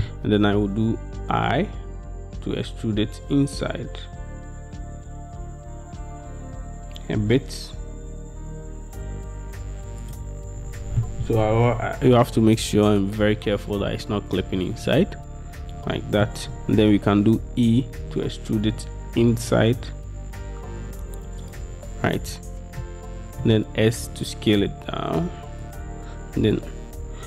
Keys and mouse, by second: 5.5-10.7 middle drag, 16.0-20.8 middle drag, 17.7 e, 22.9 click, 23.0 middle click, 24.0 s, 25.7 click, 26.8 s.